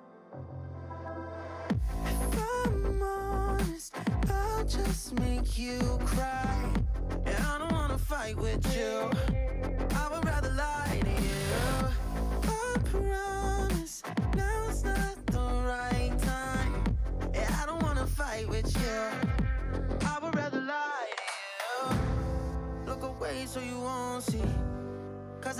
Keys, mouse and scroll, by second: 0.2 shift+middle click, 0.9 click, 1.9 shift+s, 2.4 click, 2.6-3.2 scroll down 5, 2.7 middle click, 3.2 Tab, 3.5-4.3 right drag, 4.3 shift+middle click, 4.6 alt+z, 4.8-5.4 scroll up 3, 5.0 middle click, 5.4 r, 11.4 ctrl+z, 11.7-12.6 scroll down 2, 12.6 ctrl+shift+z, 13.0-13.3 scroll up 4, 13.3 scroll down 3, 13.5 middle click, 13.8 r, 15.0 click, 15.2-16.3 middle drag, 16.3 ctrl+z, 16.5 ctrl+z, 16.8 click, 17.1 click, 17.4 scroll down 2, 17.5-18.1 middle drag, 18.1 Tab, 18.4 KP_1, 18.8 KP_3, 19.2 shift+middle click, 19.4-19.7 scroll up 4, 19.7 alt+z, 20.1-22.0 drag, 22.6-24.0 middle drag, 24.3 KP_3, 24.6 shift+middle click, 24.9 KP_1, 25.2 shift+middle click.